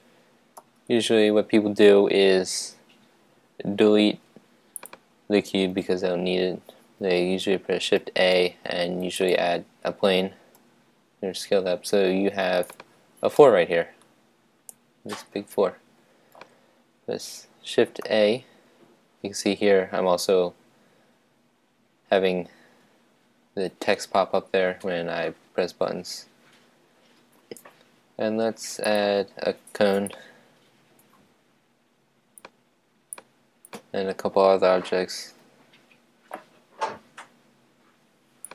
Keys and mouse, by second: 0.6 x, 8.0 shift+a, 10.5 s, 12.7 click, 13.3-15.1 middle drag, 18.0 shift+a, 24.4 shift+a, 30.1-32.4 drag, 33.1-34.9 drag, 35.1 shift+a.